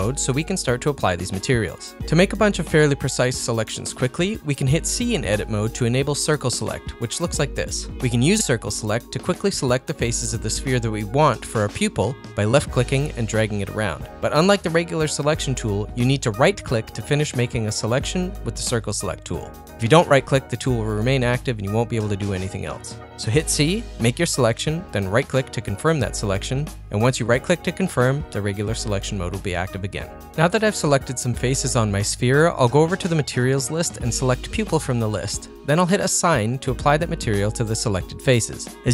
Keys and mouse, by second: 0.2 click, 0.9 click, 1.4 Tab, 2.9 shift+click, 3.4 ctrl+click, 3.9 click, 7.3 c, 36.2 click, 38.3 click.